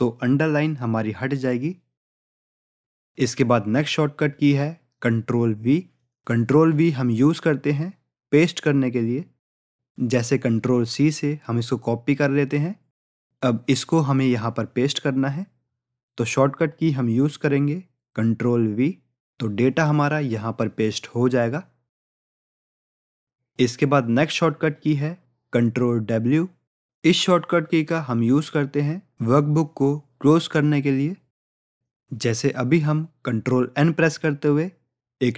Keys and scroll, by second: 10.9 ctrl+c, 17.8 ctrl+v, 32.1 ctrl+n.